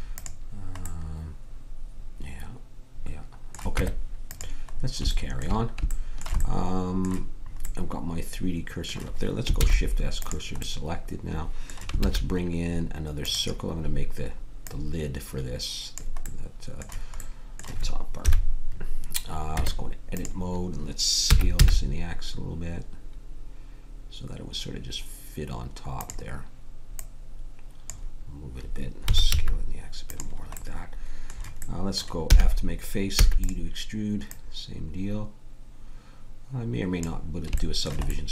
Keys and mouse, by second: 0.8-2.7 middle drag, 3.7 Tab, 9.6 shift+s, 12.0 shift+a, 14.6-16.2 drag, 18.2 KP_7, 19.5 Tab, 21.3 s, 26.9 click, 29.0 s, 32.3 f, 33.1 e, 34.2-36.3 drag.